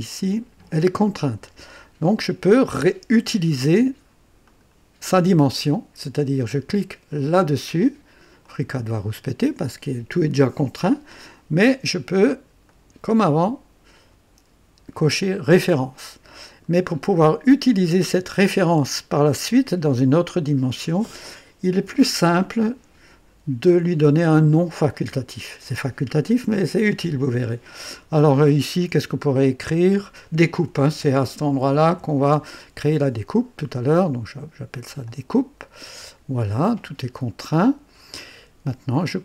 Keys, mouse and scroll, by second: 4.4 click, 8.4 click, 12.6 click, 15.2 click, 19.1 click, 30.4-32.7 typing, 35.0 click, 36.6 scroll down 1, 37.4-38.3 right drag.